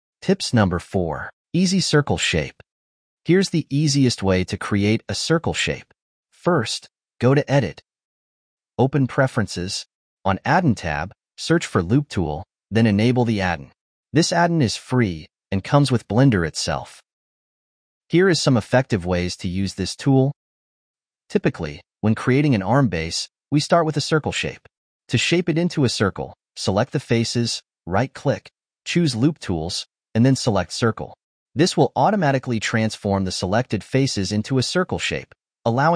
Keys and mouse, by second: 3.2-4.4 middle drag, 4.9-7.8 ctrl+middle drag, 7.9-9.6 drag, 20.8-23.1 drag, 23.1 Tab, 24.4 click, 25.1 shift+click, 25.7 shift+click, 27.7-29.4 right drag, 32.0 r, 32.5 s, 33.0 middle click, 34.0-35.9 typing.